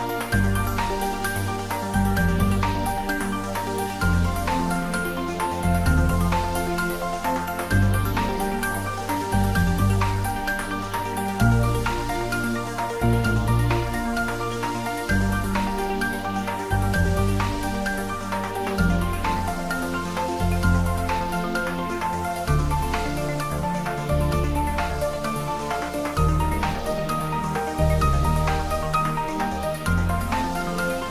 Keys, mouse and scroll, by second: 0.6 scroll down 1, 2.8-7.1 middle drag, 13.3-14.6 scroll up 1, 14.6 Tab, 15.7 1, 17.8 click, 18.3 shift+z, 19.8-21.9 drag, 21.9 scroll down 1, 23.2 click, 24.4-27.4 drag, 27.4 g, 27.8 z, 29.5 click, 30.1 Tab, 30.5 scroll down 1, 30.8 middle click.